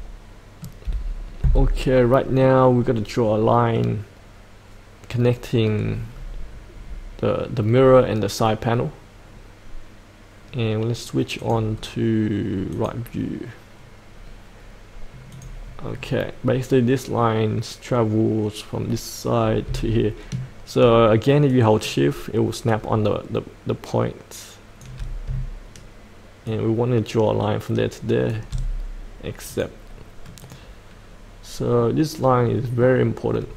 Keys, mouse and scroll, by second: 0.8 F8, 1.5-4.4 middle drag, 6.0-11.4 scroll down 1, 11.4 click, 11.7-12.7 scroll down 1, 12.7 click, 14.1-15.3 scroll down 1, 15.3 click, 15.9-19.6 scroll down 1, 21.4-24.8 shift+drag, 26.4-28.3 shift+drag, 29.4 click, 31.7-32.9 middle drag.